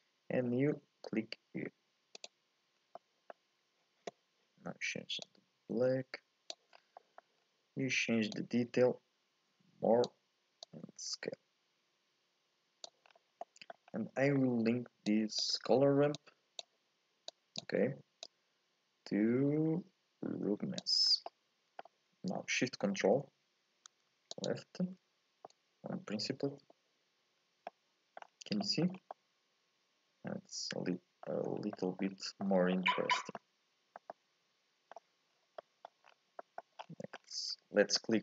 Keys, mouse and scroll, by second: 2.8 scroll up 1, 3.0 middle click, 3.6 scroll up 1, 5.2-6.7 drag, 6.7 scroll down 1, 7.0 middle click, 7.4-8.3 scroll up 1, 8.3-13.1 drag, 13.1-13.4 scroll down 3, 13.4 middle click, 13.9-15.1 scroll up 2, 14.2 middle click, 15.1 click, 16.1 click, 17.3-18.3 drag, 21.1 scroll down 2, 21.3-24.3 middle drag, 24.4 ctrl+shift+click, 25.5-27.4 middle drag, 27.4 scroll down 1, 27.7 middle click, 28.2-28.6 scroll up 4, 28.6 shift+middle click, 28.9 scroll down 3, 29.1-31.2 middle drag, 31.2-31.7 scroll up 2, 31.7 middle click, 32.1-32.4 scroll down 1, 32.4-34.9 middle drag, 34.9-35.3 scroll up 1, 35.3 scroll down 3, 35.6 middle click, 36.0-36.4 scroll down 1, 36.4 middle click, 36.8-37.7 scroll up 10, 37.7 scroll up 1, 37.9-38.2 middle drag.